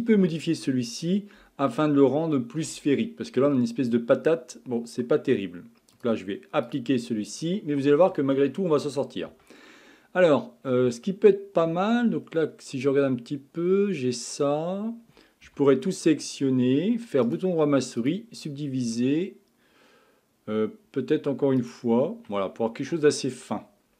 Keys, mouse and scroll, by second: 5.9-9.1 drag, 9.3 Tab, 9.9-11.1 scroll up 6, 11.1-12.2 shift+middle drag, 12.2-12.6 scroll down 1, 12.6-15.5 scroll up 4, 15.5 a, 17.3-20.4 right drag, 21.6 click, 22.3-23.4 scroll down 9, 23.4-23.9 scroll up 9.